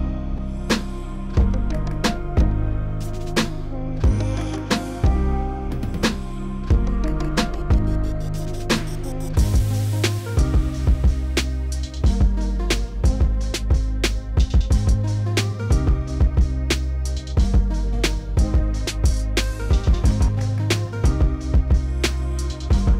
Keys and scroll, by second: 1.8 s, 7.2 s, 9.8 s, 17.6 s, 21.5 s.